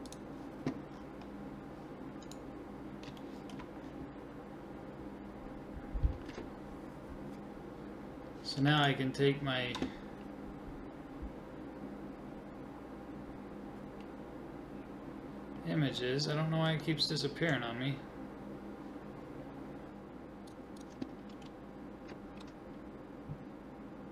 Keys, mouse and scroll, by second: 0.9-3.2 middle drag, 2.3-15.0 right drag, 3.2-8.8 drag, 15.0-20.5 middle drag, 15.9-20.5 scroll down 1, 20.5 click, 21.1-22.3 middle drag, 22.3 g.